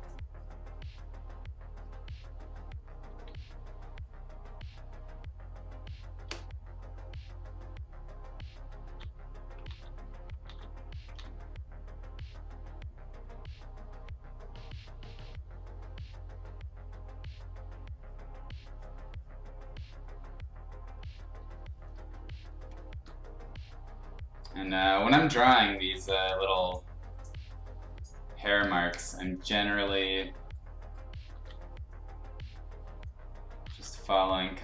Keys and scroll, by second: 3.2 x, 4.7 x, 8.7 ctrl+z, 9.6 ctrl+z, 10.4 ctrl+z, 11.1 ctrl+z, 22.1 space, 28.7 space, 31.3 ctrl+z, 33.6 ctrl+z.